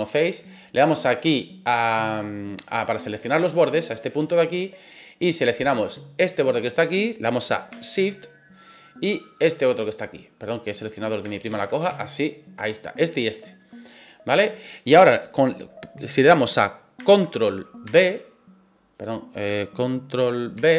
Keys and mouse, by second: 2.6 click, 5.7 right click, 6.2-7.7 middle drag, 9.4 shift+right click, 9.9 shift+middle click, 10.5 middle click, 11.5 ctrl+z, 12.2 shift+right click, 12.7-15.1 middle drag, 17.8 b, 20.6 ctrl+b.